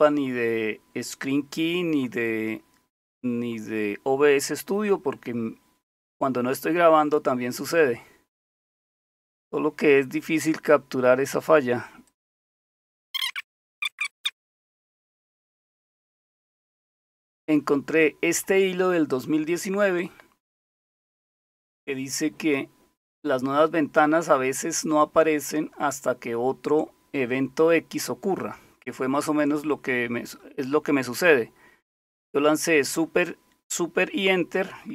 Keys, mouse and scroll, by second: 12.1 click, 12.8-14.8 typing, 12.8 click, 14.6 scroll down 1, 15.6-16.1 scroll down 1, 16.1 typing, 19.1 click.